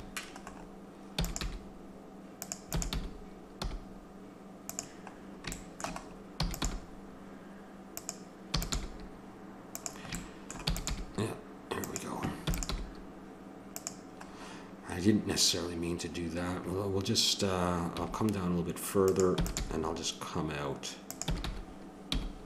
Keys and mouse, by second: 1.2 e, 1.4 g, 2.7 click, 2.8 e, 4.7 e, 6.4 e, 6.7 g, 8.5 e, 8.7 g, 10.7 e, 10.9 g, 12.5 e, 12.7 g, 18.0 g, 19.4 e, 19.6 g, 21.3 e.